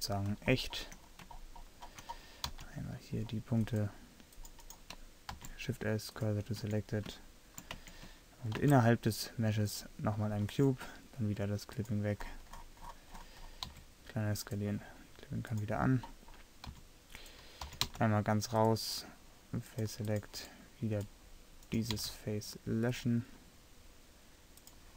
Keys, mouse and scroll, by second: 0.5 middle click, 2.6 c, 5.4 shift+s, 6.8 Tab, 7.9 Tab, 8.7 shift+a, 12.9 middle click, 13.8 s, 16.8 s, 17.7 g, 22.1 x.